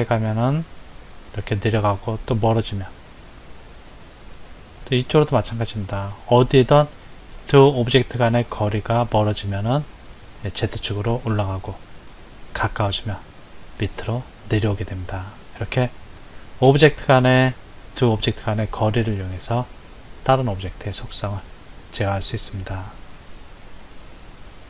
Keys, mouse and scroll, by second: 4.8 click, 7.4 click, 8.1 click, 16.2-22.2 middle drag.